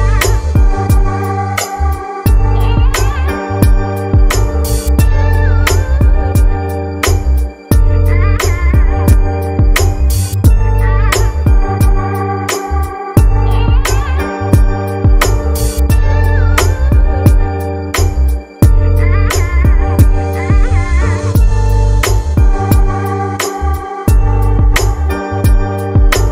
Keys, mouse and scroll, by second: 0.3-4.1 drag, 7.1 click, 8.4 middle click, 9.0 click, 13.4 middle click, 13.8 click, 18.6 click, 23.0-26.3 right drag.